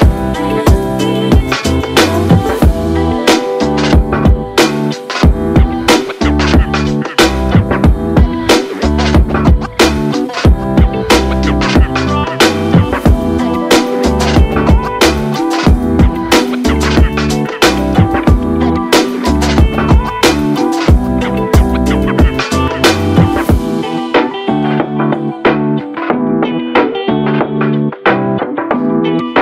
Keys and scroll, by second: 2.1 ctrl+d, 9.2 ctrl+d, 21.2-21.9 typing, 23.8 ctrl+z, 27.7 ctrl+d.